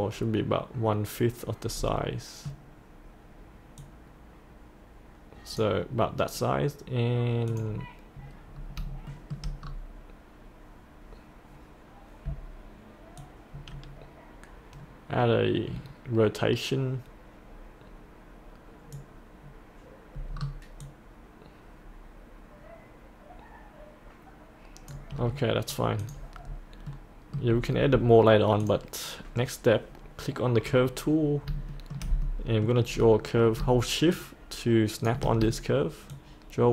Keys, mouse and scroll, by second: 2.0 middle click, 3.8-5.6 drag, 8.6 scroll up 1, 9.1 shift+middle click, 9.6-11.3 scroll down 1, 13.2-19.8 drag, 20.3-20.8 scroll down 1, 20.8-24.9 drag, 25.1 scroll up 1, 26.0 click, 26.5-26.9 scroll up 1, 26.9 middle click, 27.5-28.6 scroll down 1, 28.6 click, 31.7 shift+middle click, 32.2 middle click, 32.9-33.6 scroll down 1, 34.1 shift+click, 36.1 shift+click.